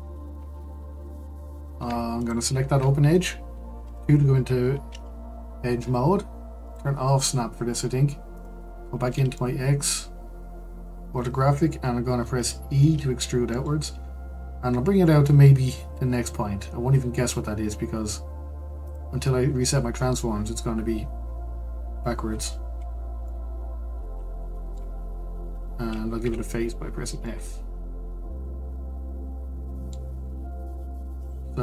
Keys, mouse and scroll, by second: 2.2 alt+click, 3.8 2, 6.6 click, 8.3 click, 8.9-9.3 scroll up 1, 9.3 shift+middle click, 10.2-11.1 scroll up 2, 12.8 e, 21.7-22.6 scroll down 2, 22.6-23.2 scroll up 2, 23.2-24.9 middle drag, 24.9-26.2 scroll down 2, 26.2 f, 26.7-27.2 scroll down 4, 27.2-31.2 middle drag, 31.2-31.6 drag.